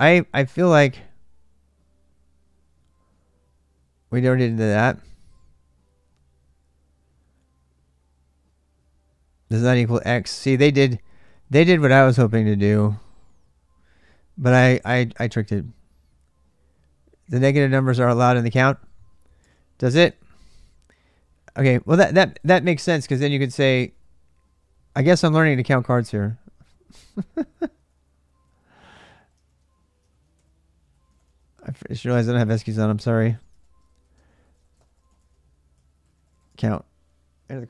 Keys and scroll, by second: 31.3-36.3 typing, 32.5 ctrl+[, 32.6 ctrl+j, 32.9 ctrl+[, 33.3 Return.